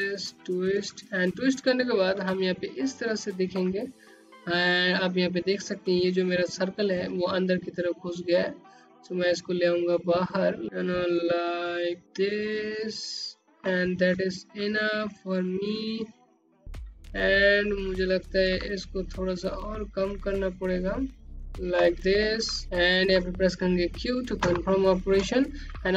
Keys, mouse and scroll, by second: 0.3 scroll down 1, 0.7 click, 2.0 scroll up 1, 7.6 click, 8.3 middle click, 12.5 scroll down 1, 13.1 alt+click, 16.2 alt+middle click, 17.9 click, 18.5 ctrl+middle click, 21.2 alt+click, 22.8 q, 23.5 scroll up 1, 24.2 alt+click, 25.6 scroll down 1.